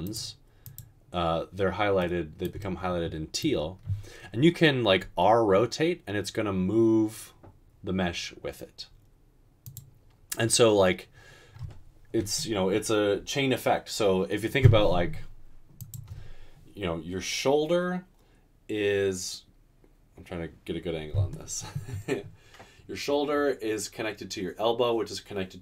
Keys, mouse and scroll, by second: 5.0 r.